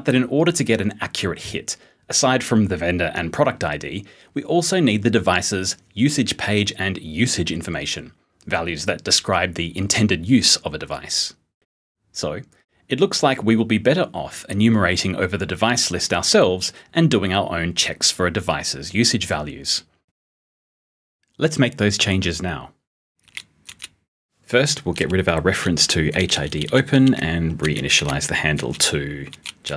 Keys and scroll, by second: 23.2 p, 26.1 *, 27.9 *.